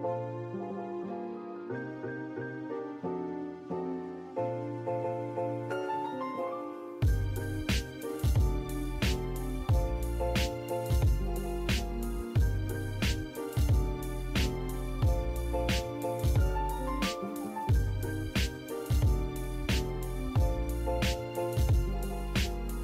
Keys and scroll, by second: 0.5 Escape, 7.3 Escape, 9.5 Escape, 11.8-13.5 typing, 19.7 Escape.